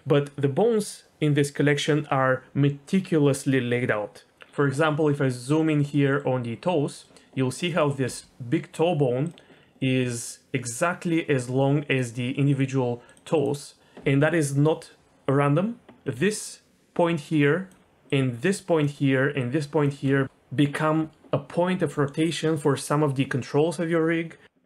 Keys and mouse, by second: 5.9 middle click, 6.9 middle click, 7.6 click, 8.0 g, 9.8 middle click, 11.9 click, 13.4 click, 16.2-19.3 d, 16.3 click, 18.1 click, 19.4 click, 19.8 d, 19.9 d, 20.0 d.